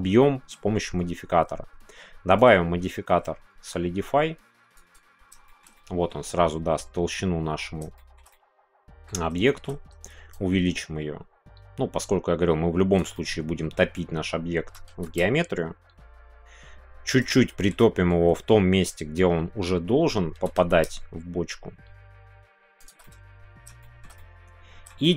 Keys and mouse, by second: 0.2-0.7 middle drag, 2.4-5.3 drag, 5.4 shift+middle click, 5.7 middle click, 7.9 shift+middle click, 8.3-9.3 middle drag, 9.4 shift+middle click, 10.3-13.0 shift+drag, 13.1-15.2 middle drag, 15.2 shift+y, 17.2 click, 17.4 middle click, 17.8 middle click, 19.1-19.7 middle drag, 20.8 shift+y, 22.7 shift+click, 23.0 middle click, 23.8 shift+middle click, 24.1 middle click, 25.0 shift+middle click.